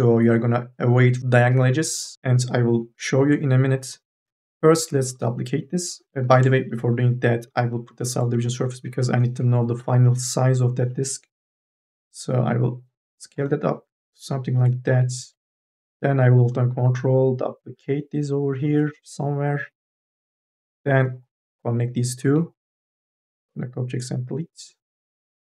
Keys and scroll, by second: 6.2 ctrl+z, 9.6 t, 14.7 e, 24.8 1.